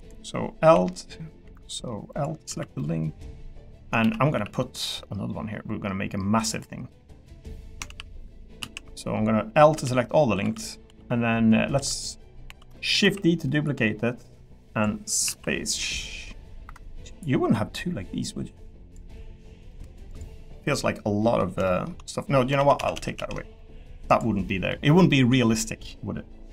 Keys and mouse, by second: 1.4 Escape, 1.7 middle click, 2.2 click, 2.5 l, 2.8 middle click, 4.0 shift+d, 4.3 x, 6.4 click, 7.9 ctrl+z, 9.7 l, 10.4 l, 10.8 l, 12.5 l, 13.0 shift+d, 15.2 s, 17.8 click, 19.7 middle click, 20.4-21.4 middle drag, 21.6 shift+middle click, 22.6 ctrl+z, 23.6 middle click, 24.5 middle click, 25.1 middle click, 25.5 middle click.